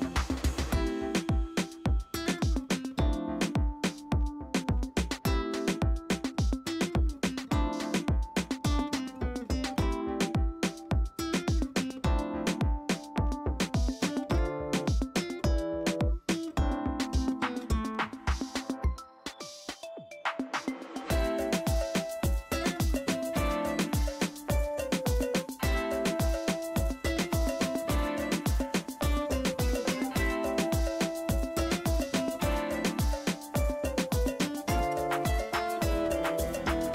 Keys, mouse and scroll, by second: 1.6-3.4 drag, 8.1 click, 8.4 o, 10.1 right click, 11.0 click, 12.4-13.6 typing, 14.8-17.9 typing, 16.2 click, 18.5-25.4 drag, 29.9 [, 30.6 [, 30.8 click, 31.3 [, 31.6 [, 32.7-36.9 drag.